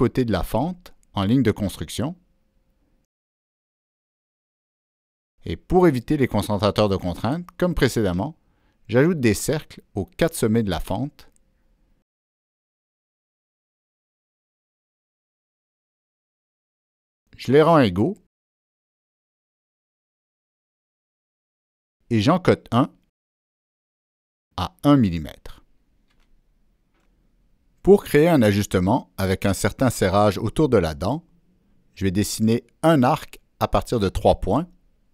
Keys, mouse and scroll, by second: 1.0 right click, 1.0 click, 1.1 Escape, 1.6 click, 1.7 Escape, 1.7 right click, 2.2 Escape, 2.2 click, 2.8 click, 3.8 right click, 4.2 Escape, 5.3 click, 5.9 right click, 6.6 click, 6.8 right click, 7.2 click, 7.2 right click, 7.9 click, 8.7 click, 9.5 click, 10.2 click, 11.3 click, 12.2 click, 12.8 Escape, 13.7 ctrl+click, 14.5 ctrl+click, 15.7 ctrl+click, 19.2 ctrl+click, 20.1 click, 20.7 right click, 22.3 click, 22.4 right click, 23.3 click, 23.8 right click, 24.7 Return, 26.2 Escape, 34.9 click.